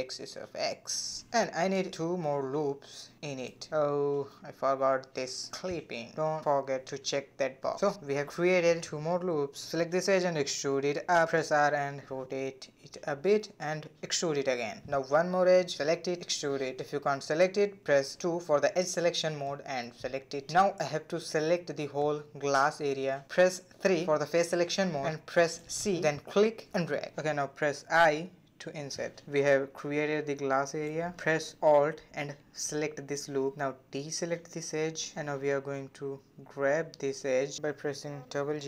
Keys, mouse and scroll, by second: 0.6 a, 1.6 ctrl+r, 3.4 a, 4.9 click, 5.4 ctrl+r, 8.0 2, 8.5 click, 9.7 e, 11.1 r, 12.3 g, 13.3 e, 14.4 g, 15.7 click, 16.3 e, 17.5 shift+middle click, 17.7 c, 19.9 3, 20.8 c, 27.9 i, 29.1 a, 29.3 a, 30.2 2, 31.2 alt+click, 32.8 c, 36.9 g.